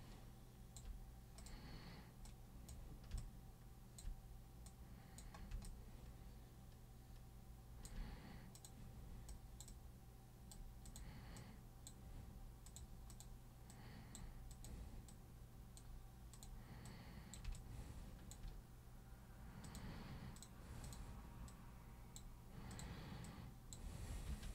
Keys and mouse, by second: 1.4 super+click, 2.3-2.7 super+drag, 3.2-4.0 alt+super+drag, 4.7 super+click, 5.7-7.9 alt+super+drag, 8.6 super+click, 9.3 super+click, 9.7 super+click, 10.9 super+click, 11.4 super+click, 12.7 super+click, 13.1 super+click, 13.7 super+click, 14.5 super+click, 15.1 super+click, 16.3 super+click, 16.9 super+click, 17.6-18.3 alt+super+drag, 19.7 super+click, 20.4 super+click, 20.8 super+click, 21.5 super+click, 22.7 super+click, 23.2 super+click, 24.3 super+3.